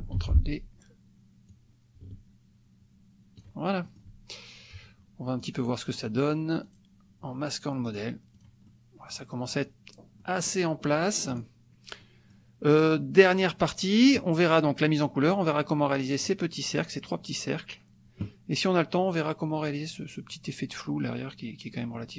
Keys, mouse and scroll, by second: 0.1 ctrl+d, 1.5-3.6 drag, 3.9 click, 5.4 click, 6.7 click, 7.8 click, 8.4 click, 8.7 click, 10.2 click, 11.3 click, 12.0 middle click, 22.0 click.